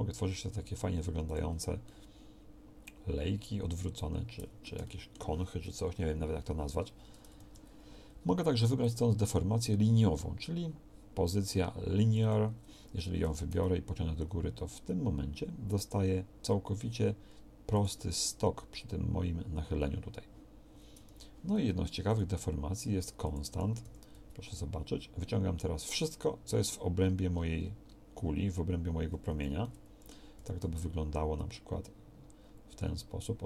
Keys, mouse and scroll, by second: 2.4-3.8 middle drag, 5.9 KP_1, 7.4 ctrl+z, 13.3 g, 21.1 ctrl+z, 23.9 g, 30.4 g.